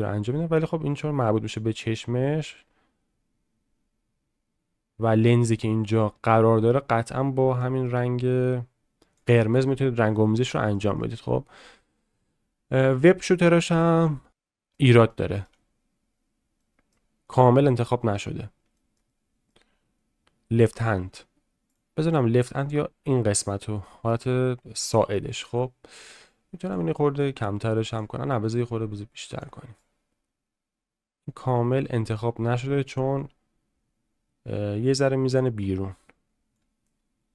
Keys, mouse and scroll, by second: 10.1 middle click, 10.5 shift+middle click, 11.0 middle click, 11.8 middle click, 13.0 shift+middle click, 14.3 middle click, 15.1 shift+middle click, 16.6 middle click, 17.4 shift+middle click, 17.8 middle click, 18.7 shift+middle click, 19.1 middle click, 22.0 click, 23.8 shift+middle click, 24.7 middle click, 26.3 click, 27.2 click, 28.5 click, 29.8-36.6 drag.